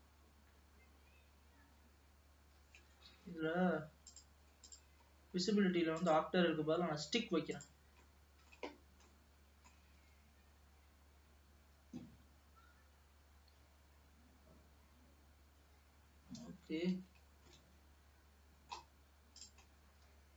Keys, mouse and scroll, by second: 4.2 click, 4.8 click, 5.2 scroll down 3, 6.0-8.2 drag, 8.2-10.2 middle drag, 10.2 g, 17.6-19.5 middle drag, 19.5 click, 19.8-20.2 scroll up 2, 20.2 g.